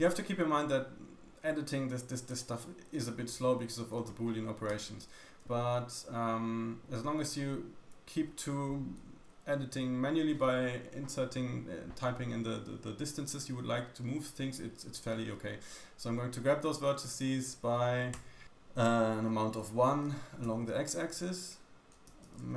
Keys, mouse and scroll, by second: 0.8 click, 2.3 click, 6.5 Tab, 19.3 g.